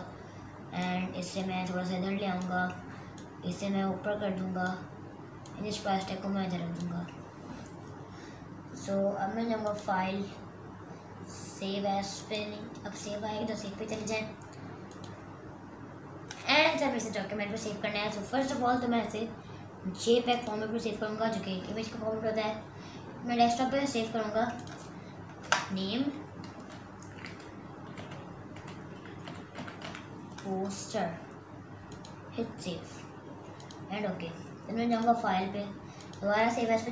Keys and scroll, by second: 25.5 BackSpace, 27.8-30.3 typing.